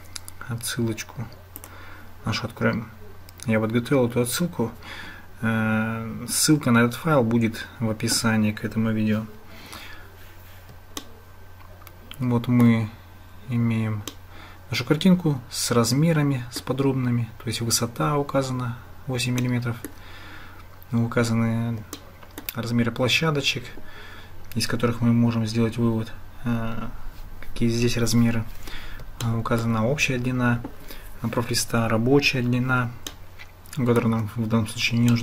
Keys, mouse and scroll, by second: 11.0-12.7 shift+middle drag, 14.2-16.6 middle drag, 19.6 shift+click, 22.0 shift+click, 29.2 shift+click, 33.2 shift+click.